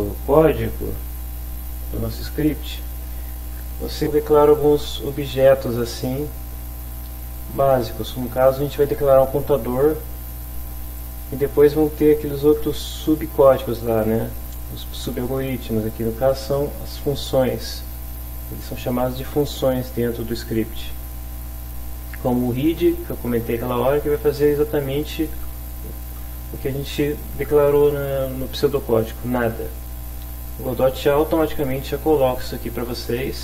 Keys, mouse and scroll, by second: 11.0 click, 30.4 click, 32.6-33.4 drag.